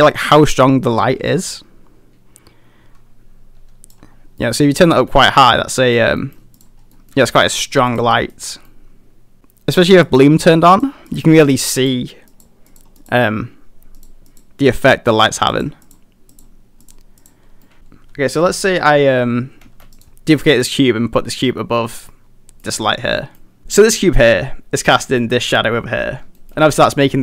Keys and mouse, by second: 4.4 middle click, 5.1-6.0 middle drag, 5.1 a, 6.2 middle click, 7.0 middle drag, 7.2 a, 7.3 a, 7.5 middle click, 7.9 click, 8.1 middle click, 8.7 middle click, 10.1 click, 10.7 click, 11.1 click, 11.8 click, 12.3 click, 12.7 click, 14.0 click, 14.3 click, 15.2 click, 15.5 click, 15.9 click, 16.4 click, 16.9 click, 17.2 click, 17.7 middle click, 17.7 a, 19.7 shift+d, 20.0-20.8 drag, 22.2-22.7 middle drag, 23.2 middle click, 24.3 g, 26.4 shift+middle drag.